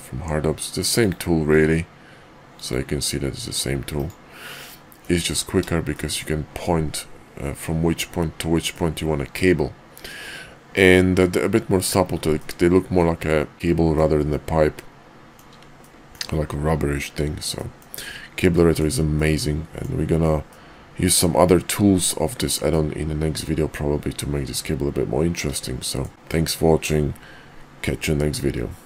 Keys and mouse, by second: 0.9 click, 1.4 q, 4.5 middle click, 5.8 shift+middle click, 8.7-11.2 middle drag, 12.3-13.5 middle drag, 13.9-15.3 middle drag, 15.8-16.1 shift+middle drag, 17.4-17.8 middle drag, 18.5 shift+middle drag, 19.1-19.8 middle drag, 20.4-21.1 middle drag, 22.7-23.4 middle drag, 25.8 shift+middle click.